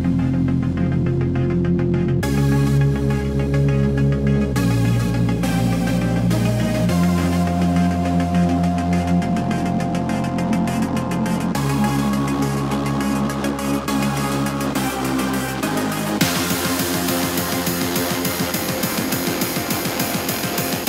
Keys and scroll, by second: 0.3 KP_4, 0.5 Return, 1.2 KP_3, 1.4 Return, 5.5 space, 6.7 KP_Subtract, 6.9-8.8 typing, 8.6 KP_Subtract, 8.9 Home, 13.8 Home, 16.5 super+z, 17.5 super+d, 19.1 v, 19.1 super+-, 19.6 KP_0, 20.2 KP_0.